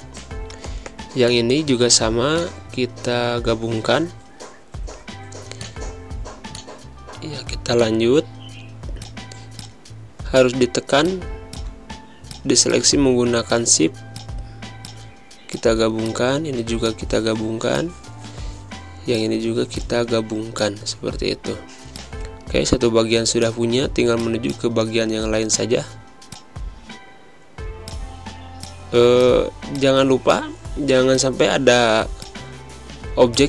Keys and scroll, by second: 2.2 space, 7.5 space, 12.0 space, 17.3 space, 19.7 space, 23.7 z, 24.5 v, 31.4 z, 32.3 v.